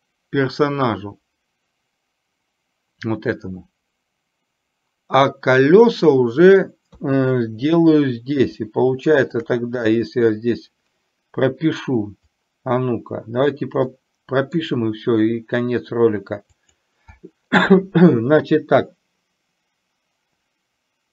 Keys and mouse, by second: 9.4 click, 12.4-13.7 drag, 14.0 middle click, 16.7 click.